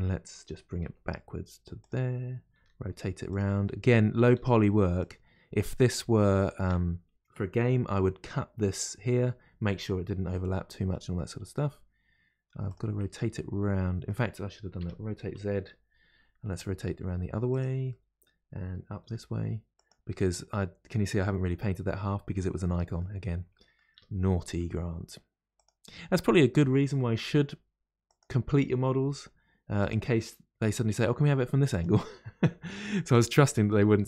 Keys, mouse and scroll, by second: 0.8 g, 0.8 g, 3.6 middle click, 4.3 r, 5.8-9.4 middle drag, 10.9-12.6 middle drag, 12.6 click, 13.0-14.8 middle drag, 14.8 r, 14.8 r, 17.9-19.0 middle drag, 19.0 r, 20.1-23.9 middle drag, 23.9 r, 25.9-27.2 middle drag, 27.2 r, 33.3-34.0 middle drag.